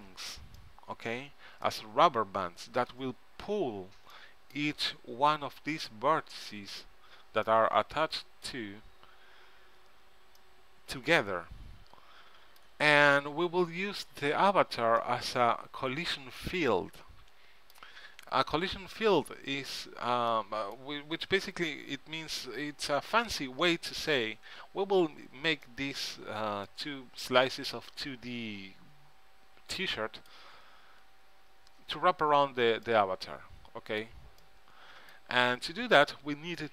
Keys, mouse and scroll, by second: 16.8-20.5 middle drag, 33.1-35.2 middle drag.